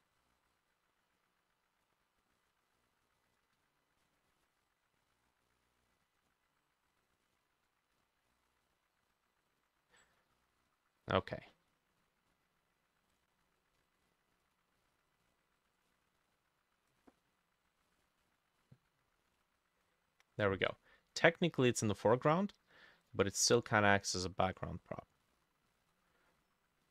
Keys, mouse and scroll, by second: 2.7 ctrl+d, 3.6 ctrl+z, 7.3 shift+click, 8.0-8.7 scroll up 1, 10.0 middle click, 10.0-11.1 scroll down 1, 11.1 middle click, 21.7 middle click, 22.2 middle click, 23.4 middle click, 24.0 middle click, 24.6 middle click, 25.3 middle click, 25.7 middle click, 26.3-26.9 scroll up 4.